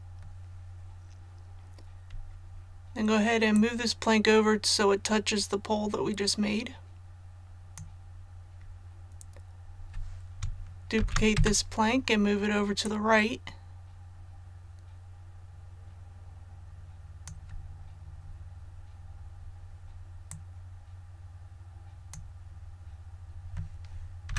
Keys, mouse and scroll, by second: 3.5-8.4 drag, 10.9 shift+d, 12.8-17.4 drag, 18.6 scroll up 1, 20.2-22.4 drag, 24.2 a.